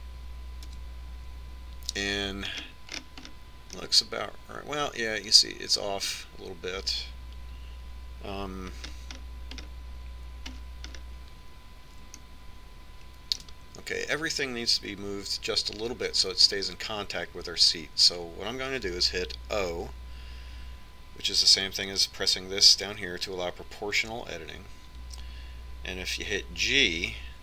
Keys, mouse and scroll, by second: 0.1 KP_1, 1.7 KP_Decimal, 5.2-15.1 middle drag, 20.9 o.